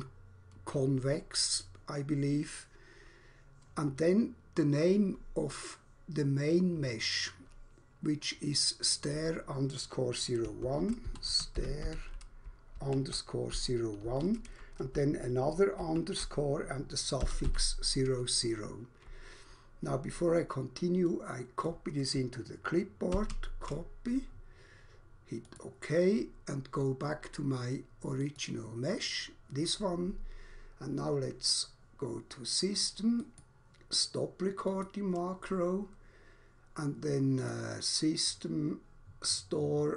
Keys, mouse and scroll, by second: 10.3-14.1 typing, 15.8 shift+-, 17.3 typing, 20.9 click, 21.6 click, 23.1 ctrl+c, 25.4 click, 28.3 click, 33.3 click, 34.8 click, 37.3 click.